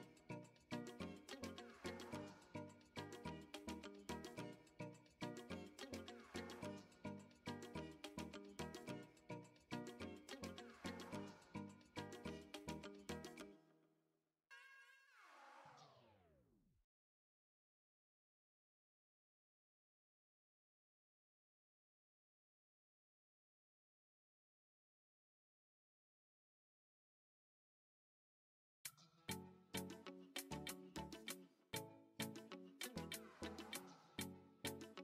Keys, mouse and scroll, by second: 2.9-6.0 drag, 6.4-6.9 middle drag, 9.7 ctrl+z, 11.1 middle click, 11.8-12.1 shift+middle drag, 12.3 Tab, 12.6 middle click, 13.0 Tab, 14.3 shift+s, 16.0 Tab, 16.4-17.9 right drag, 18.2 Tab, 18.6 shift+middle click, 21.3 click, 23.0-25.6 drag, 26.5 shift+middle click, 26.9 middle click, 27.8 Tab, 28.3-28.8 middle drag, 29.3 middle click, 30.2 Tab, 30.7 Tab, 31.0-31.3 middle drag, 31.5 click, 31.8 shift+middle click, 33.4 shift+middle click, 34.2-34.9 middle drag.